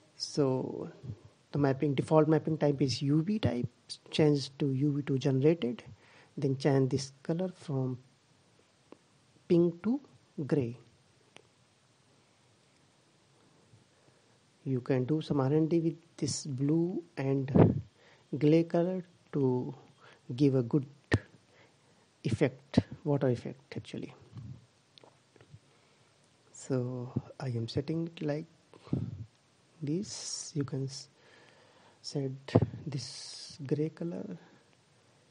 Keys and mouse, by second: 2.3-3.9 drag, 8.4-11.1 middle drag, 11.1-12.9 drag.